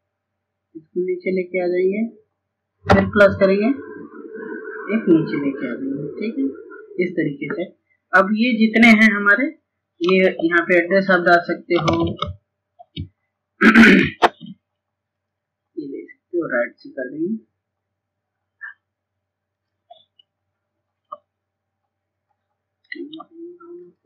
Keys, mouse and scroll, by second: 9.9 click, 14.1 click, 22.9 shift+click.